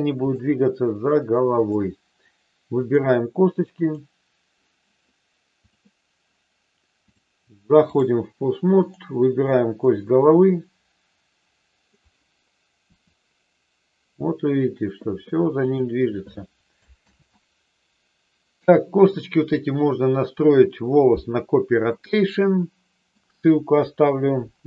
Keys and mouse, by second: 0.3-1.7 drag, 2.7 click, 3.8 click, 7.1-8.1 drag, 8.7-10.3 drag, 10.3-11.8 middle drag, 12.8 r, 15.6 click, 17.1 ctrl+z, 21.9-23.2 middle drag, 23.7 KP_1.